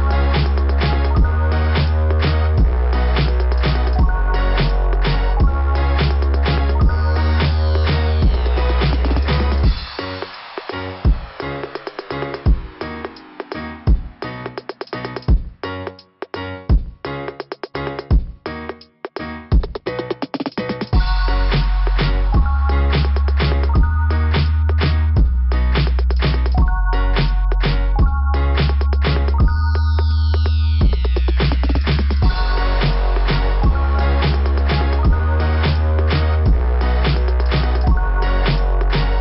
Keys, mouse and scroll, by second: 1.5 click, 1.6 click, 1.8 click, 1.9 click, 5.6 click, 5.9 click, 6.2 click, 8.5 scroll up 2, 16.6 scroll down 2, 19.2 click, 19.3 click, 23.9 click, 24.1 click, 25.3 click, 29.9 click, 30.1 click, 30.3 click, 30.4 click, 32.2 click, 32.5 click, 32.6 click, 32.8 click, 33.0 click, 33.1 click, 34.4 click, 34.5 click, 34.9 scroll up 2, 38.4 scroll down 2.